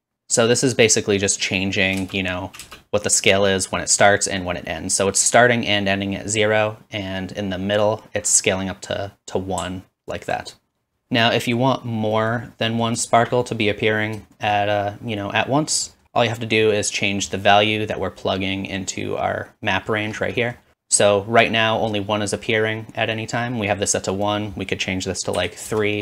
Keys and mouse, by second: 2.0-7.9 drag, 2.0 space, 2.6 space, 9.3-12.5 drag, 13.0-26.0 shift+drag.